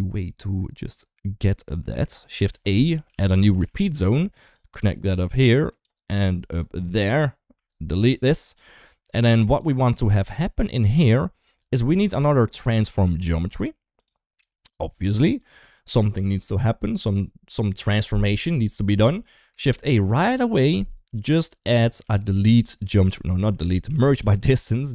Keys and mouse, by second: 2.2 shift+a, 4.9 click, 6.2 click, 7.6 ctrl+right click, 8.5 shift+middle click, 8.9 click, 9.8 click, 10.2-10.7 drag, 11.7 shift+a, 14.9 g, 15.6 shift+middle click, 19.4 shift+a, 22.2 e.